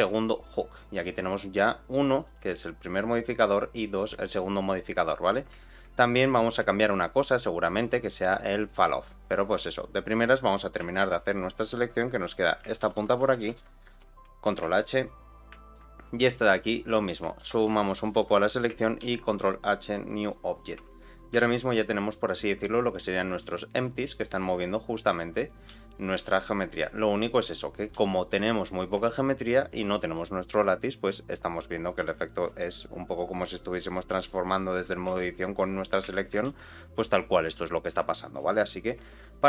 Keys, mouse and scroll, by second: 1.1 click, 2.2 click, 5.1-5.5 scroll down 3, 5.5 shift+middle click, 5.9 middle click, 6.3 scroll up 2, 6.6 shift+middle click, 8.6 click, 10.5 scroll up 1, 10.8 shift+middle click, 12.0 click, 12.8 ctrl+KP_Add, 13.0 ctrl+KP_Add, 13.1 ctrl+KP_Add, 13.2 ctrl+KP_Add, 13.4 ctrl+KP_Add, 13.9 ctrl+KP_Add, 14.4 ctrl+h, 15.2 scroll down 1, 15.5 shift+middle click, 16.5 click, 17.4 ctrl+KP_Add, 17.6 ctrl+KP_Add, 17.9 ctrl+KP_Add, 18.2 ctrl+KP_Add, 19.0 ctrl+h, 19.8 scroll down 2, 20.1 middle click, 20.4-20.7 scroll up 1, 20.7 Tab, 20.9 middle click, 21.3 shift+middle click, 21.7-22.1 scroll down 2, 22.1 middle click, 22.6 click, 23.4 g, 25.4 click, 25.6 g, 26.3 middle click, 26.7-27.2 scroll up 1, 27.2 click, 27.5 middle click, 27.9 g, 29.0 shift+middle click, 29.8 click, 30.1 g, 33.5 middle click, 34.7 click, 35.0 Tab, 35.5-36.0 scroll down 2, 36.1 shift+middle click, 36.4 g, 38.5 scroll up 2, 38.8 Tab, 39.3-39.4 scroll down 2.